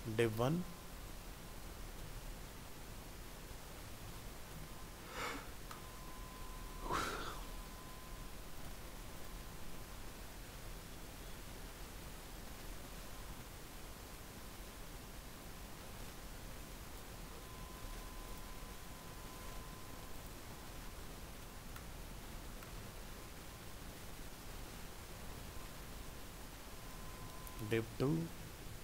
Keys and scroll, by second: 17.4 ctrl+c, 19.4 ctrl+v, 22.8 ctrl+s, 27.7 ctrl+v.